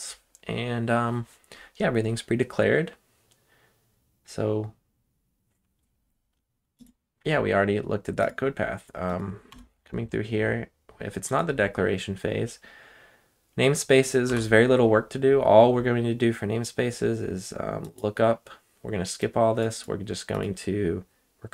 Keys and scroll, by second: 9.5 Return, 14.3 Return.